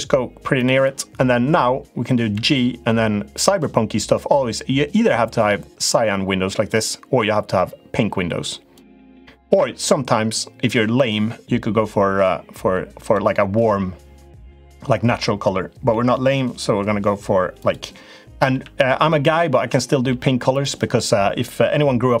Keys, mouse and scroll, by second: 2.1 g, 6.9 g, 9.2 g, 15.6 g, 18.2 g, 19.8 g.